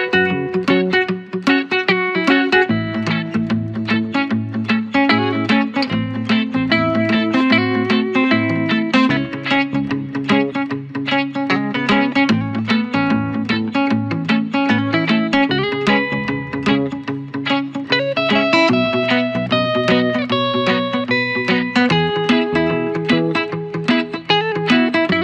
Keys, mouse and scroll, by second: 1.1 ctrl+j, 1.8 click, 4.6 ctrl+-, 5.1 ctrl+=, 5.5 ctrl+-, 7.8 ctrl+=, 8.9 space, 9.7 space, 11.0 space, 11.7 click, 20.0 ctrl+alt+e, 21.9-25.2 drag.